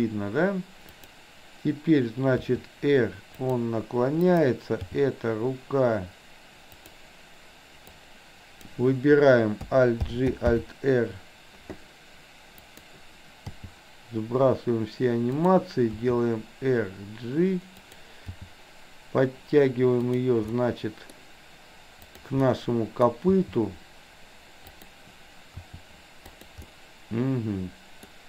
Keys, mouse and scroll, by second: 0.9 click, 2.4 r, 4.3 click, 4.8 g, 7.9-8.8 drag, 10.0 alt+g, 10.5 alt+r, 12.5 click, 13.4 g, 15.8 r, 18.2 g, 20.5-21.2 middle drag, 22.0 click, 22.4-23.0 middle drag, 23.3 g, 25.5 r, 26.7-28.2 middle drag.